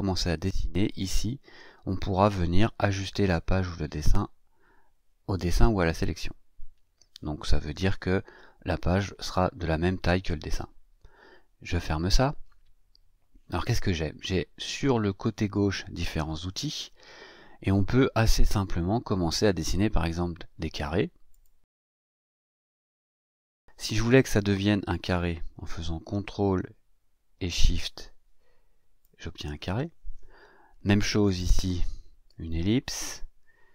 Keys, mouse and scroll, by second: 0.9 click, 11.7 click, 21.3 click, 22.1 click, 27.9-29.2 ctrl+shift+drag, 31.2 click, 32.3 click.